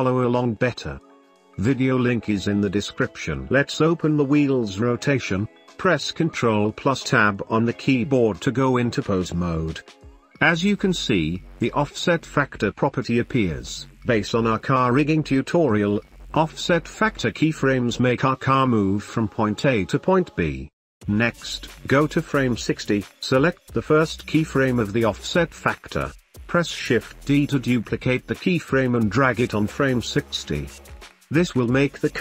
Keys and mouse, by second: 4.8-5.5 drag, 6.0 ctrl+s, 7.0 ctrl+Tab, 8.3-9.9 drag, 12.5-13.5 drag, 15.4 space, 17.3 space, 18.4-19.9 drag, 21.1-22.1 drag, 23.5-24.3 drag, 25.5 shift+d, 27.9-28.5 drag, 28.9-29.3 drag, 30.9 space.